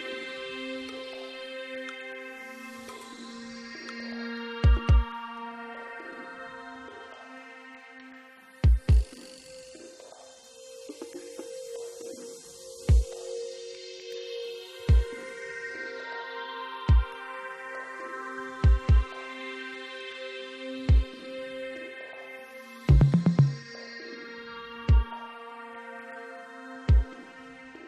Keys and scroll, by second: 27.0 alt+z.